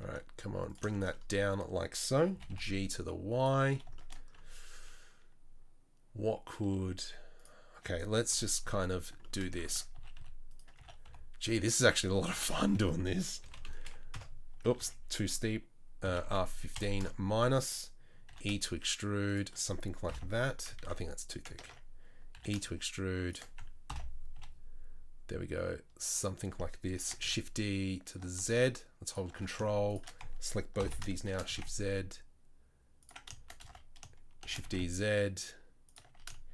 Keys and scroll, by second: 0.1 s, 2.3 g, 6.6 s, 8.3 KP_3, 8.6 z, 10.0 s, 10.8 s, 13.4 r, 14.8 ctrl+z, 16.1 r, 18.3 e, 20.1 ctrl+l, 20.8 ctrl+z, 21.7 ctrl+z, 22.4 e, 23.9 ctrl+l, 24.4 g, 27.0 shift+d, 30.8 ctrl+l, 31.3 shift+d, 33.6 a, 34.5 shift+d, 36.1 a.